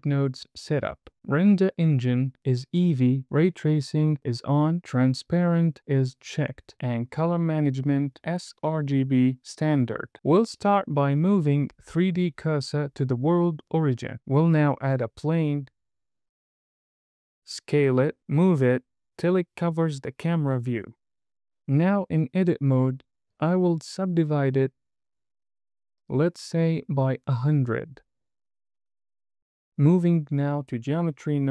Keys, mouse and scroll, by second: 3.8-4.8 scroll down 1, 6.7-7.5 scroll down 1, 10.8 shift+s, 14.6 shift+a, 17.4 KP_0, 17.6 scroll down 2, 17.8 s, 18.3 click, 18.6 g, 18.8 y, 19.6 click, 20.2 s, 21.0 g, 21.2 y, 24.6-26.9 right drag, 26.9-29.2 drag, 28.1 KP_0, 29.8 Tab.